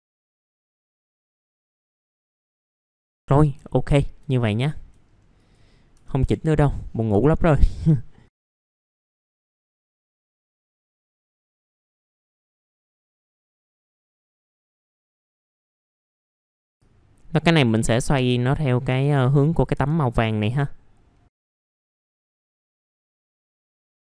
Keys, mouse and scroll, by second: 0.2 ctrl+click, 0.9 click, 1.8 alt+middle click, 2.8 F4, 3.1 alt+middle click, 3.7 alt+middle click, 4.4 alt+middle click, 5.0 scroll up 1, 5.3 click, 6.0 F4, 6.6 click, 7.0 scroll down 1, 7.2 alt+middle click, 8.3 click, 8.4 middle click, 8.6 alt+middle click, 8.8 middle click, 9.5 click, 9.9 f, 10.1 scroll down 1, 10.4 click, 11.9 middle click, 12.2 click, 12.4 alt+middle click, 12.6 click, 13.3-13.9 scroll down 2, 13.4 alt+middle click, 14.3 click, 14.5-15.3 typing, 14.9-15.2 scroll down 1, 15.2 scroll up 1, 15.8 click, 16.3 scroll up 1, 16.4 typing, 16.8-18.1 drag, 18.1 F3, 18.6 scroll up 1, 18.9 typing, 19.7 F3, 20.3 click, 21.3 F3, 21.4 scroll down 1, 21.6 F3, 21.7 scroll up 1, 21.8 alt+middle click, 22.3 click, 22.9 alt+middle click, 23.3 alt+middle click, 23.9 click.